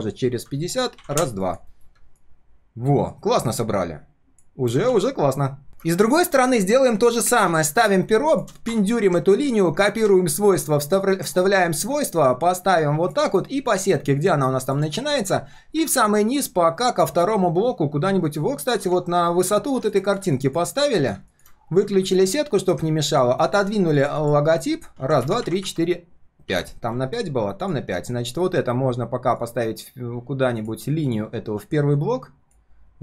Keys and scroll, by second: 4.9 ctrl+s, 9.9 ctrl+alt+c, 11.0 ctrl+alt+v, 13.3 ctrl+shift+4, 20.8 ctrl+shift+4, 24.9 ctrl+s.